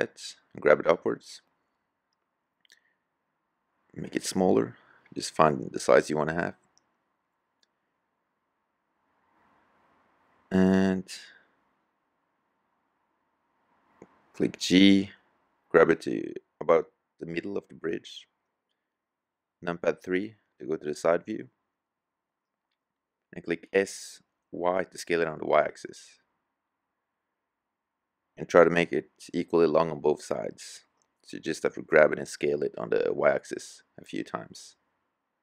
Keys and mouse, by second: 2.1 s, 10.0-10.6 middle drag, 12.9 g, 18.3 KP_3, 23.1 s, 30.1 g, 33.8 s.